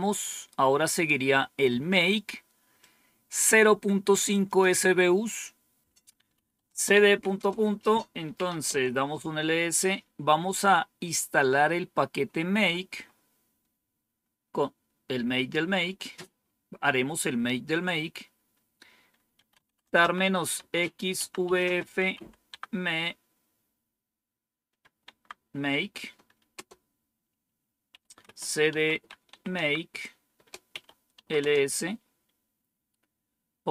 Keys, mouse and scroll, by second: 2.7-4.1 drag, 4.4 click, 6.0-8.9 typing, 12.9 scroll up 1, 14.0-15.0 scroll up 1, 15.0-15.7 scroll up 1, 15.7-16.3 scroll up 1, 16.3-17.0 scroll up 1, 19.0-22.6 typing, 24.7 typing, 27.8-31.6 typing.